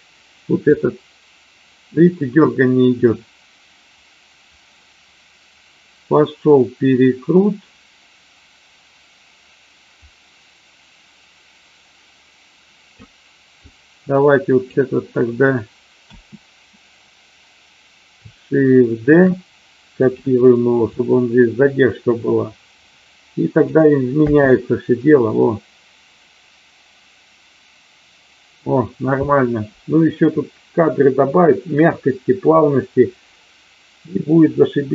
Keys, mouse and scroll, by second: 0.7-13.0 drag, 13.5-14.7 drag, 15.9 a, 19.0 shift+d, 19.9 click, 20.9-23.7 drag, 24.2 space.